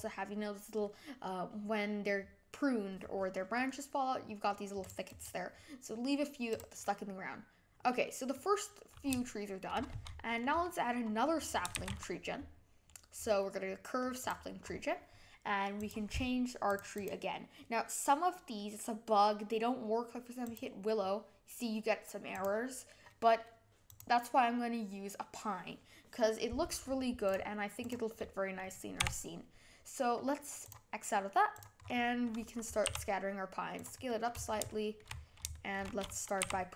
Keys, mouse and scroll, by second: 3.5-4.8 middle drag, 4.8 click, 5.0-6.5 right drag, 6.5 click, 6.8-11.7 middle drag, 11.7 shift+a, 14.6-15.5 scroll up 6, 15.7-16.7 drag, 16.9-20.1 drag, 22.3-25.4 drag, 27.2 click, 27.8 click, 28.9 n, 30.6-31.6 drag, 31.8-32.8 scroll down 7, 32.8 s, 34.0 scroll up 1, 34.0 middle click, 34.3 scroll down 5, 34.6-35.0 shift+middle drag, 35.0 scroll up 3, 35.5-36.4 shift+middle drag, 36.4 g.